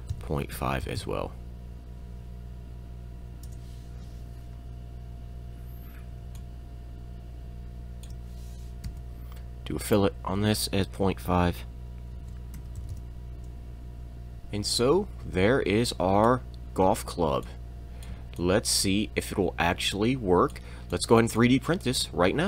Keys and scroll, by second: 0.1-1.0 typing, 3.4 Return, 5.2 e, 6.2 shift+e, 6.3 shift+e, 8.8 f, 8.9 f, 9.8 e, 12.1-12.9 typing, 14.1 Escape, 14.1 shift+e, 14.1 m, 16.8 e, 16.8 e, 17.4 e, 18.1 shift+e, 21.0 e.